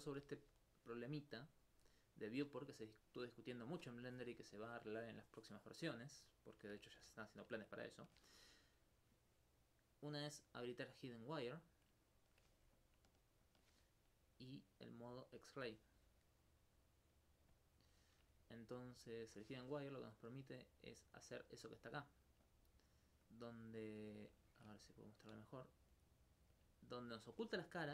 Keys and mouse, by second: 0.6 middle click, 10.3 click, 12.8 alt+click, 13.5 alt+click, 16.0 middle click, 17.6 click, 18.4 alt+click, 18.8 alt+click, 20.0-21.6 alt+drag, 22.4 alt+click, 26.8 alt+click.